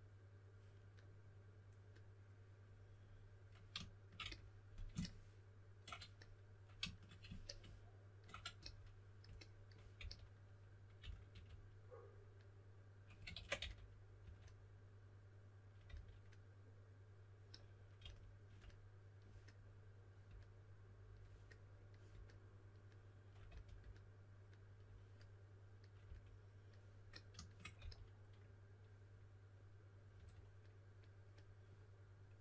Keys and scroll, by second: 9.9-11.8 typing, 13.3 super+z, 13.5-14.7 typing, 15.8 typing, 17.9 typing, 23.4 shift+s, 26.0 s, 27.7 s, 29.9-30.6 typing.